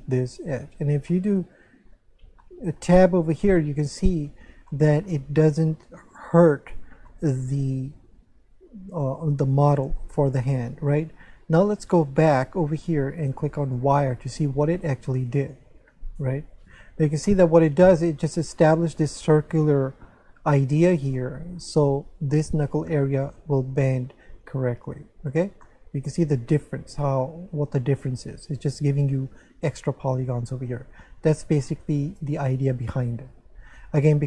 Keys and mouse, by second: 0.4 click, 1.1 middle click, 2.4 middle click, 2.8 Tab, 3.6 middle click, 4.7 middle click, 7.1 middle click, 12.1 click, 13.6 click, 15.4 click, 16.5 click, 21.2 middle click, 25.6 middle click.